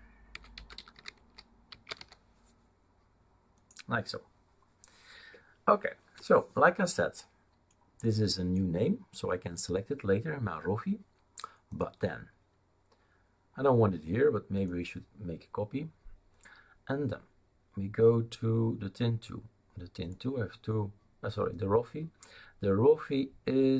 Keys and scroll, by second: 0.1-2.4 typing.